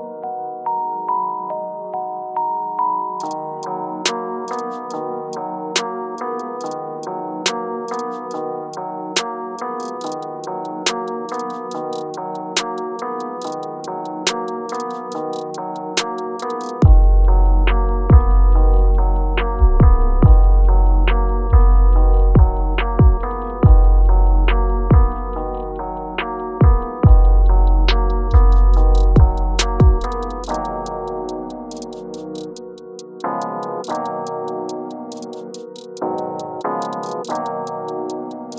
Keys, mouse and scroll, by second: 1.6 alt+scroll down 1, 2.5 shift+scroll down 1, 4.2-5.1 shift+scroll up 1, 5.3 click, 9.5-18.1 drag, 20.9 click, 26.1 click, 28.3 click, 30.2-38.5 drag.